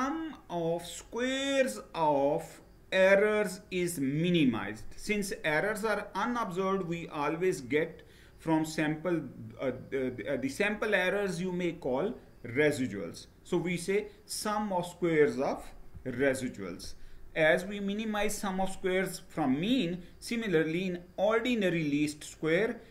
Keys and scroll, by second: 15.6 Down.